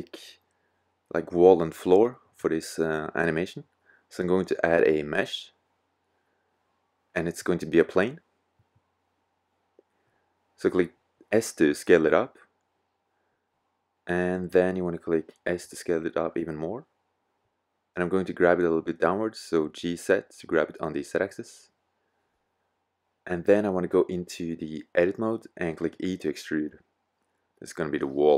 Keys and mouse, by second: 0.0-0.6 middle drag, 3.0 shift+a, 10.3 s, 12.2 middle drag, 12.4-12.8 middle drag, 14.5 s, 17.2 middle click, 17.6-18.1 drag, 19.8 g, 21.8-23.7 drag, 24.2 click, 25.5 e.